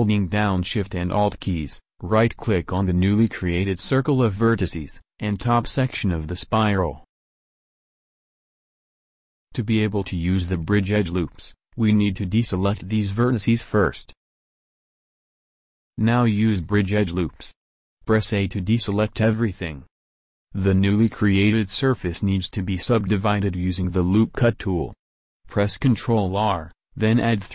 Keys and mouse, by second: 0.3 a, 2.2-3.6 middle drag, 5.5 middle click, 11.6-16.1 middle drag, 16.1 w, 18.1 a, 25.9 ctrl+r.